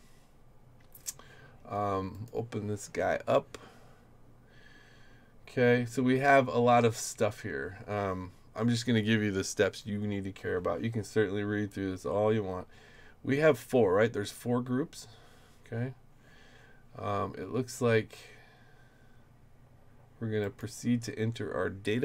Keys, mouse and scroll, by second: 2.1 click, 4.2-6.3 scroll down 8, 6.3 middle click, 15.1-16.0 scroll down 2, 16.0 scroll up 2.